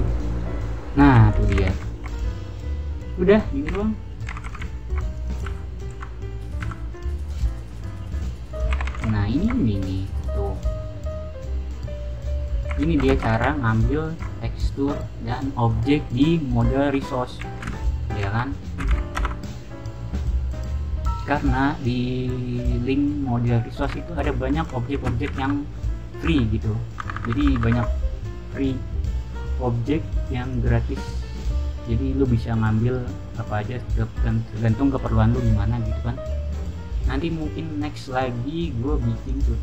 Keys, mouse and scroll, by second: 1.2-2.1 typing, 3.4-5.8 typing, 5.0-8.4 right drag, 5.1 click, 5.6 click, 6.8-8.4 drag, 8.4-9.1 typing, 9.4-10.9 drag, 9.4-11.0 right drag, 12.7 alt+s, 13.3 a, 17.0-18.1 typing, 23.5-24.3 typing, 26.2 alt+Tab, 27.2 alt+Tab, 28.5 middle click, 30.2 click, 31.6 right click, 32.0-34.8 middle drag, 32.0-33.5 scroll down 1, 32.2 right click, 33.5-34.6 scroll down 1, 34.6 scroll down 1, 34.8 right click, 35.9 scroll down 1, 36.4 scroll down 1, 39.1 click.